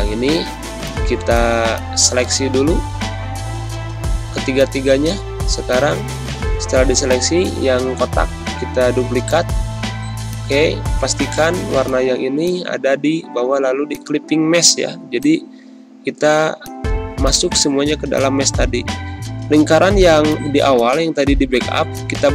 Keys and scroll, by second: 0.1 ctrl+z, 2.4 ctrl+z, 3.3 ctrl+g, 13.0 ctrl+-, 13.7 space, 18.9 ctrl+shift+].